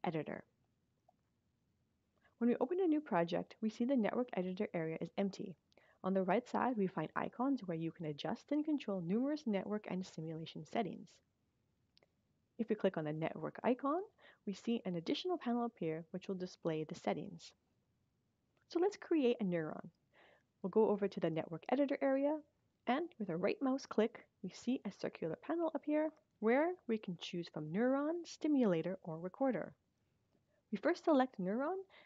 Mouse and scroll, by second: 12.7 click, 23.6 right click, 31.2 click.